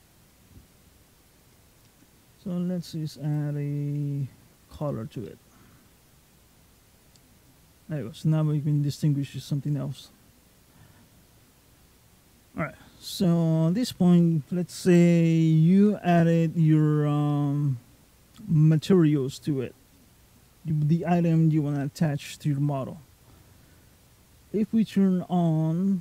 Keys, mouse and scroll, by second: 1.5 click, 3.1 click, 5.1 middle click, 11.9-12.2 scroll down 2, 12.2-12.6 scroll up 2, 12.6-14.8 scroll down 1, 14.8 scroll down 1, 15.0 shift+middle click, 15.8-16.3 scroll down 2, 16.4-16.7 shift+scroll up 1, 16.9 scroll down 1, 17.1 middle click, 18.2-19.1 scroll up 3, 19.1 middle click, 21.6 middle click.